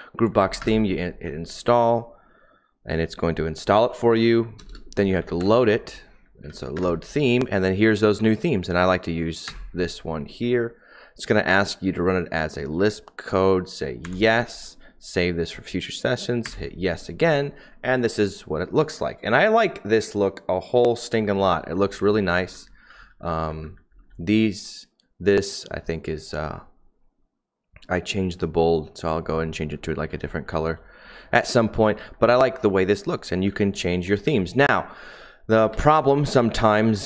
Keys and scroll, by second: 0.7 Return, 4.7-5.3 typing, 6.4 Down, 6.7 Return, 9.6 Return, 14.2 y, 16.4 y, 21.1-24.0 typing, 30.0-32.1 typing, 33.4-34.2 typing, 35.5-36.8 typing.